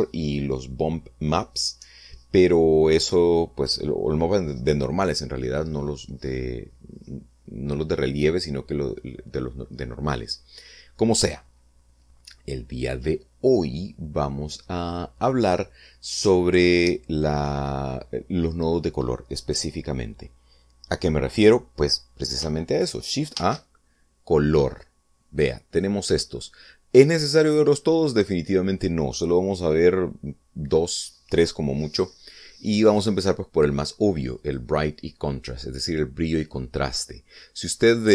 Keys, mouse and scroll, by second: 24.0 shift+a, 35.0 click.